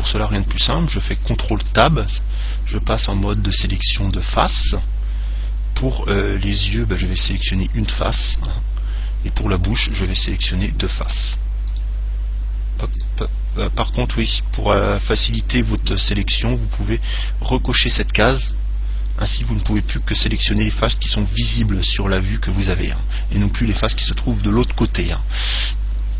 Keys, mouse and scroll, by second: 1.8 ctrl+Tab, 7.3 right click, 11.3-14.9 right drag, 18.7 click, 20.7 right click.